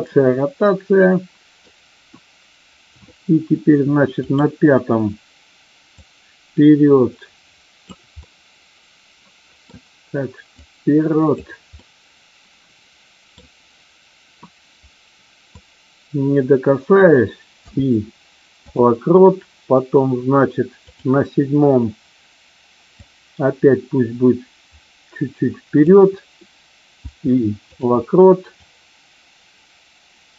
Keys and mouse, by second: 0.0-1.6 middle drag, 4.2 click, 5.8-7.8 drag, 8.1-9.6 middle drag, 10.6 click, 11.7-13.3 middle drag, 15.6-17.0 drag, 20.7 click, 23.0-25.8 drag, 28.5-30.3 drag.